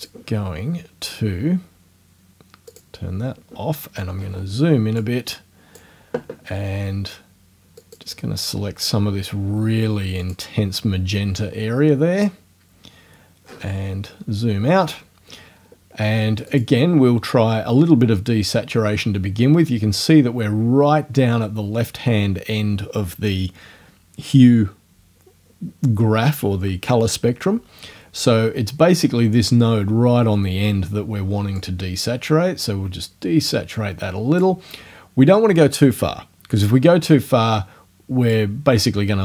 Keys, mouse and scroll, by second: 1.1 scroll up 2, 2.7 click, 4.2-4.5 scroll up 2, 5.0-6.0 drag, 7.8 click, 10.2 click, 13.5 scroll down 1, 16.5 click, 31.6 click, 35.4-38.5 drag.